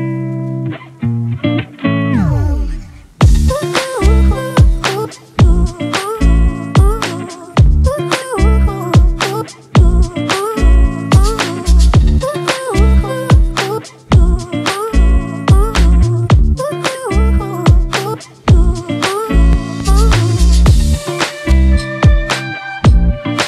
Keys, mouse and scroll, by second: 5.2 alt+right click.